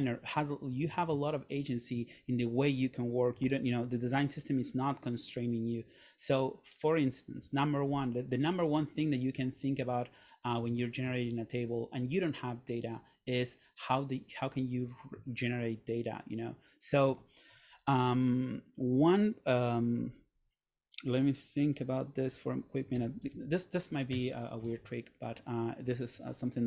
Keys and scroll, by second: 1.0 super+a, 3.6 super+/, 17.8 super+/, 23.0 super+space, 23.4 a, 24.3 Escape, 24.8 super+Tab.